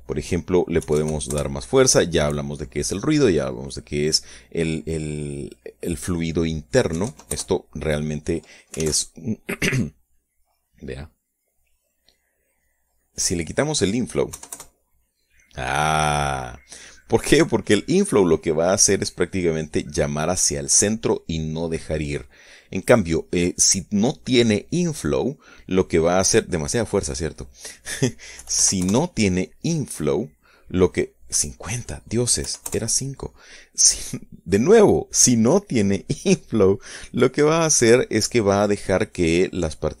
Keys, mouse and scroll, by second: 0.3 click, 1.3 KP_1, 1.5 KP_0, 1.8 KP_Enter, 6.1 click, 7.5 KP_1, 7.6 KP_0, 7.8 KP_Enter, 10.8-11.9 drag, 11.9-13.9 middle drag, 13.9 click, 14.9 KP_0, 15.1 KP_Enter, 22.9 click, 25.6-27.4 drag, 27.4 middle click, 28.1 click, 28.9 KP_9, 29.1 KP_0, 29.3 KP_Enter, 31.7 click, 33.0 KP_5, 33.2 KP_Enter, 34.8 click, 35.8-37.1 middle drag, 37.1 click, 37.5 middle click, 37.7-39.1 drag, 39.1-40.0 middle drag.